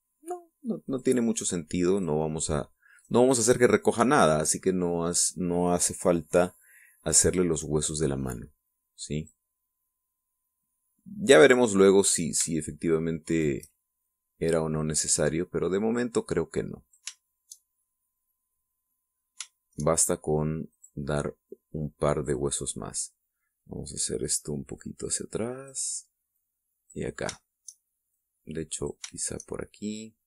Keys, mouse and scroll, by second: 1.7 right click, 2.2 click, 3.7 click, 3.7 right click, 4.3-5.5 drag, 7.4 click, 9.0-10.3 drag, 10.7-12.0 middle drag, 14.1 shift+right click, 14.9-17.9 shift+drag, 18.1 shift+middle click, 18.6-19.9 shift+middle drag, 19.9-20.3 scroll up 1, 20.3 shift+middle click, 22.3 click, 25.6-26.7 drag, 27.2 click, 28.2 shift+middle click, 29.0 click.